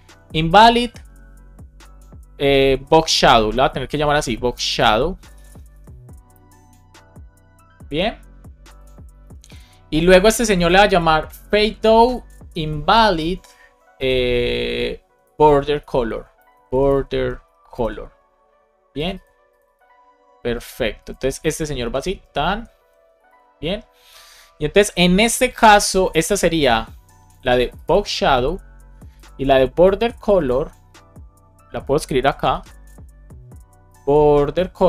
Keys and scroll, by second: 2.6 shift+b, 3.8 shift+s, 4.5 BackSpace, 9.1 super+c, 15.3 shift+b, 16.0 BackSpace, 17.2 shift+c, 21.7 Down, 22.0 alt+Return, 22.4 alt+Up, 23.2 super+s, 25.9 super+c, 27.9 super+v, 29.9 super+c, 32.1 Return, 32.4 super+v.